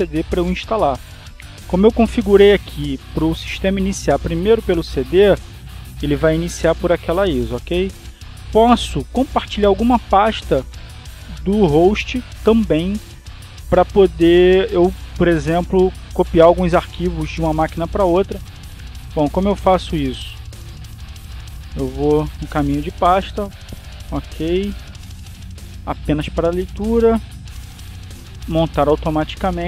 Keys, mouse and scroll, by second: 3.2 click, 9.9 click, 21.6 click, 22.7 click, 23.5 click, 24.5 click, 27.3 click, 28.1 click.